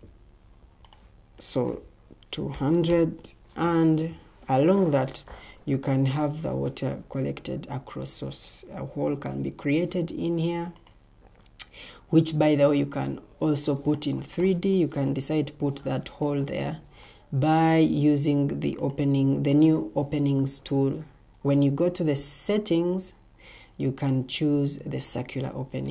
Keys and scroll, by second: 2.0-3.1 typing, 3.5 Escape, 21.4 ctrl+t.